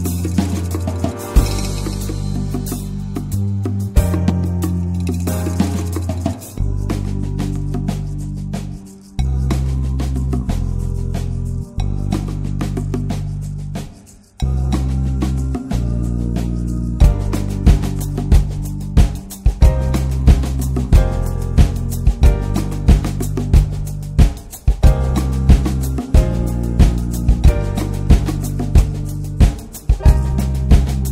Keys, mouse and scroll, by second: 0.1 click, 0.3 Tab, 0.5 click, 1.0-2.2 right drag, 2.2 ctrl+s, 2.8 /, 3.2 middle click, 3.4 Tab, 4.1 1, 4.6 click, 4.9 middle click, 5.2 ctrl+s, 5.5 shift+click, 7.0-9.1 drag, 9.7-11.5 middle drag, 11.5 alt+z, 11.7 scroll up 2, 11.9 shift+middle click, 12.3 ctrl+s, 12.5 ctrl+click, 13.0 ctrl+click, 13.5-13.9 scroll down 3, 13.9 Tab, 14.2 Tab, 14.5 2, 14.7 click, 15.1 alt+shift+click, 16.1-17.8 middle drag, 17.8 r, 18.6 1, 19.2 click, 19.7 alt+middle click, 19.9 alt+z, 20.1 alt+z, 20.3 scroll up 5, 20.6 ctrl+s, 21.0 shift+click, 21.5 scroll down 2, 21.7 shift+middle click, 21.8-22.4 shift+scroll up 2, 22.8 shift+click, 23.2 shift+click, 24.2-25.7 shift+drag, 26.6 shift+click, 27.8-29.2 shift+drag, 30.0 s.